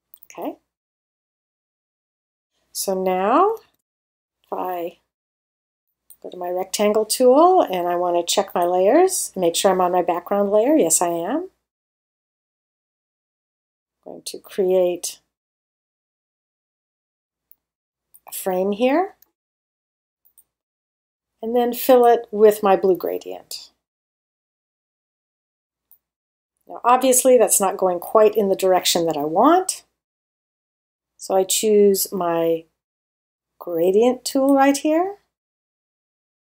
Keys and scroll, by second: 3.6 super+0, 25.5 space.